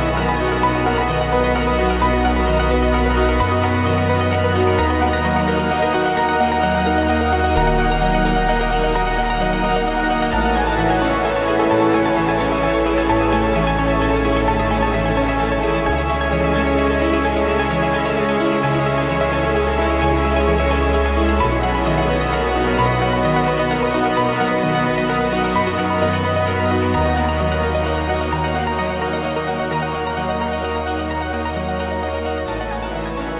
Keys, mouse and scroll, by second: 1.1-2.6 drag, 3.1 click, 3.5 click, 4.0-16.7 drag, 17.2 ctrl+z, 18.1 ctrl+z, 19.6 ctrl+click, 20.0-21.6 drag, 21.8-23.7 drag, 24.1-27.0 drag, 27.7 click, 30.3 click, 32.1 click.